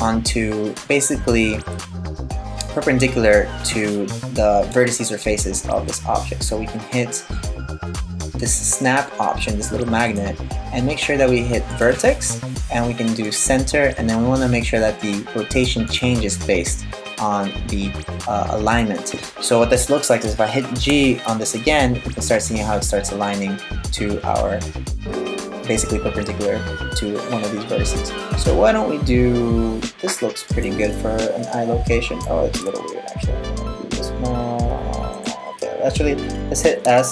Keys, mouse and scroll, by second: 8.1 click, 9.7 click, 20.5 g, 30.6 middle click, 32.3 g, 36.4 s.